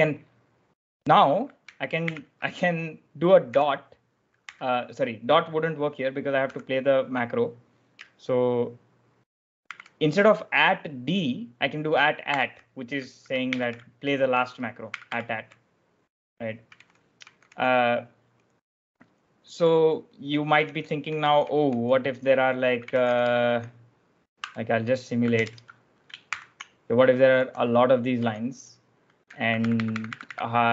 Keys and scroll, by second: 1.9 shift+=, 3.4 ., 4.3 u, 6.3 b, 9.6 shift+2, 12.2 shift+2, 13.4 shift+=, 14.8 shift+2, 14.9 shift+2, 16.3-17.9 typing, 20.3-26.1 typing, 27.3 j, 28.1 k, 29.3 ctrl+e, 29.5 ctrl+e.